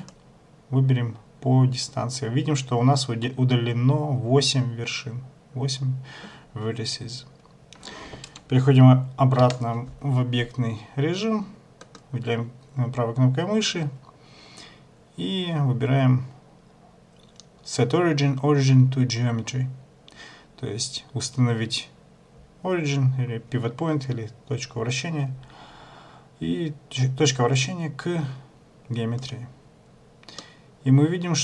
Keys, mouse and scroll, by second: 9.6 Tab, 12.0 right click, 30.5 middle click.